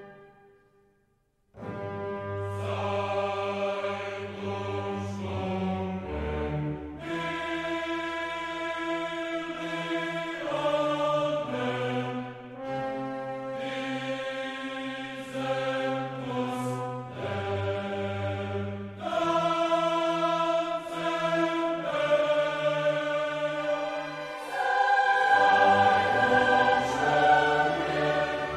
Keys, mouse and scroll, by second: 1.8-4.5 typing, 7.1-10.2 typing, 10.7 click, 11.2 click, 11.7-13.8 drag, 13.9-20.1 drag, 20.2 0, 20.7-21.1 scroll down 1, 21.4 scroll up 1, 22.1 scroll down 1, 22.6 scroll up 1, 22.9 middle click, 23.2-23.5 scroll down 2, 23.9-24.2 scroll up 2, 24.5 scroll down 2, 25.1 scroll up 2, 26.5 click.